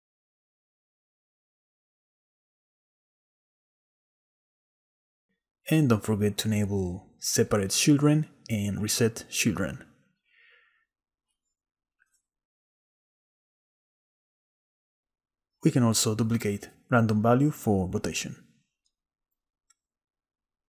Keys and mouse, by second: 1.6 shift+click, 2.0 shift+middle click, 2.5-4.0 shift+middle drag, 7.5 click, 8.1 click, 10.8 shift+click, 11.0 shift+middle click, 11.2 shift+click, 11.5 shift+middle click, 11.6 shift+click, 11.6 shift+middle click, 13.5 shift+click, 14.3 shift+click, 15.0 ctrl+z, 15.3 click, 16.0 shift+d, 16.7-17.3 drag, 18.0 click, 18.6 click, 20.3 click.